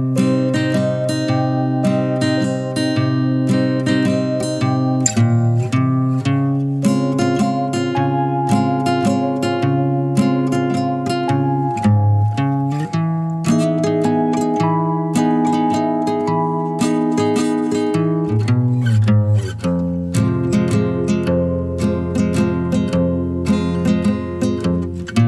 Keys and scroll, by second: 4.4 5, 15.0 0, 22.3 0.